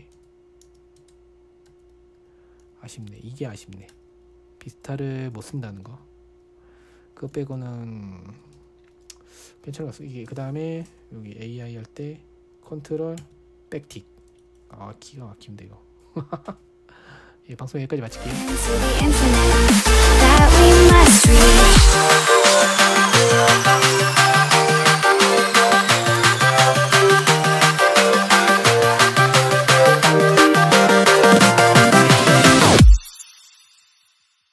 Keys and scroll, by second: 0.0-4.3 typing, 5.9 ctrl+l, 6.3 q, 7.8-10.8 typing, 13.6 ctrl+`.